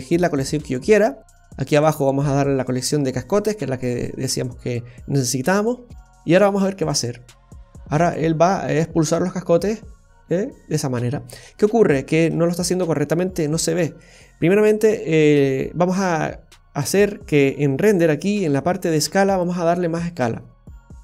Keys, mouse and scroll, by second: 0.9-1.4 scroll down 1, 1.9 click, 5.8-6.4 scroll up 1, 8.2 scroll up 1, 11.4-12.1 scroll down 5, 14.0-15.2 scroll down 7, 15.6 scroll down 1, 15.8-17.1 scroll up 7, 19.4 click.